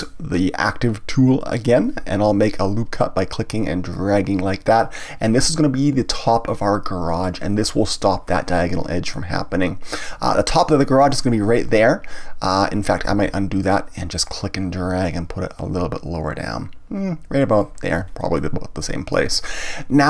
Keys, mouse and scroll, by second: 1.5-6.9 drag, 9.1-12.1 middle drag, 13.1 ctrl+z, 14.3-17.4 drag, 18.3-20.0 middle drag.